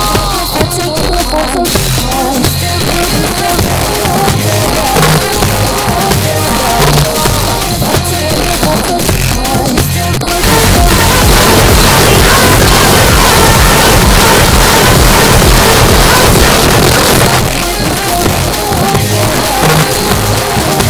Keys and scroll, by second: 16.5 Page_Down.